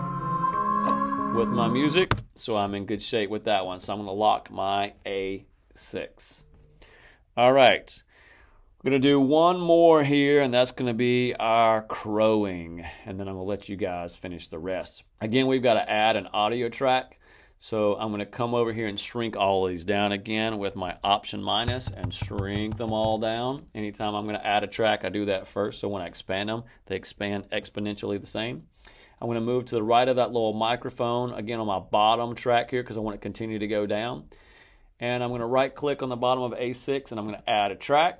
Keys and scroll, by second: 1.9 space, 21.5 alt+-.